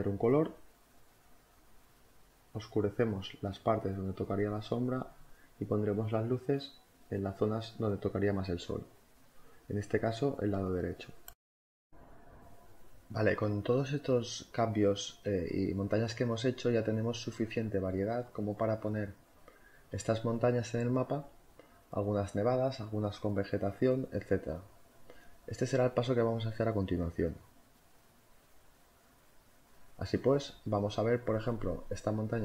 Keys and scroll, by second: 1.9-3.7 typing, 5.0-6.0 typing, 7.0 ], 8.7-9.6 typing, 12.2-13.6 typing, 16.4 ctrl+z, 20.3 [, 22.0 v.